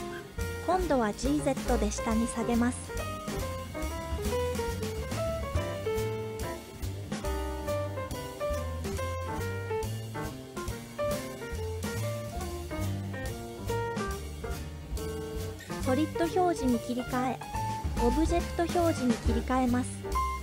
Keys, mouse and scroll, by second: 0.3 scroll down 1, 0.3 g, 2.0-3.0 scroll up 2, 3.0 z, 6.9-7.4 scroll down 2, 7.3-7.6 scroll up 2, 7.9-9.4 scroll up 2, 9.4-10.0 scroll up 1, 10.0-10.5 scroll up 1, 11.6-13.4 scroll up 2, 13.4 click, 16.8 super+click, 18.2 super+click, 20.3-20.4 super+drag.